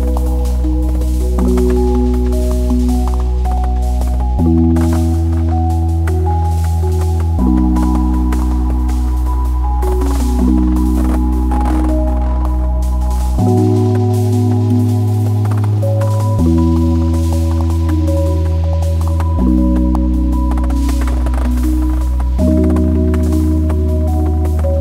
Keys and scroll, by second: 21.2 n, 22.3 `.